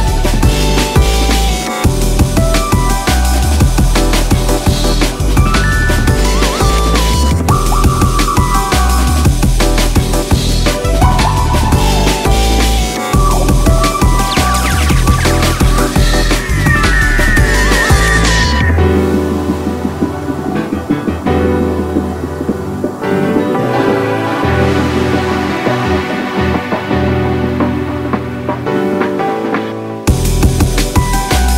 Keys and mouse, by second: 0.3 alt+click, 1.7 alt+click, 3.0-4.0 alt+drag, 7.4 alt+click, 11.0 alt+click, 13.6 alt+click, 16.3 alt+click, 18.6 alt+click, 21.0 alt+click, 22.7 alt+click, 29.2 alt+click.